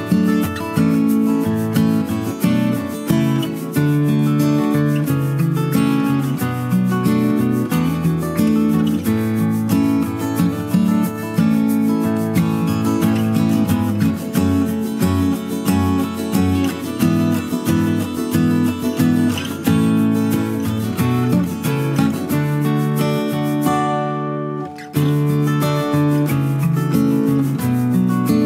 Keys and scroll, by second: 9.1 space, 9.4 space, 14.2 space, 17.6 space.